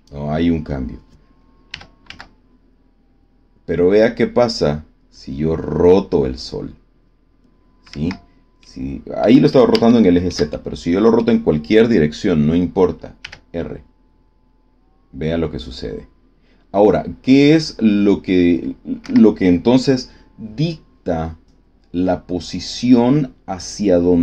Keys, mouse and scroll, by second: 1.7 r, 2.0 z, 7.9 Escape, 8.5 click, 9.3-10.4 middle drag, 10.8 middle click, 13.1 r, 18.9 Escape.